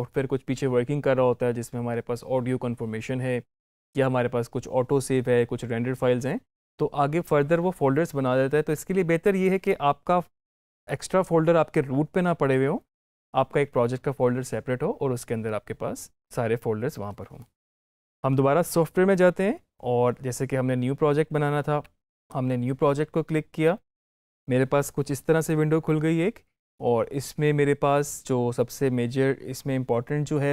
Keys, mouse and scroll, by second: 10.4-13.1 drag, 18.3 alt+click, 18.4 alt+Tab, 22.1 click.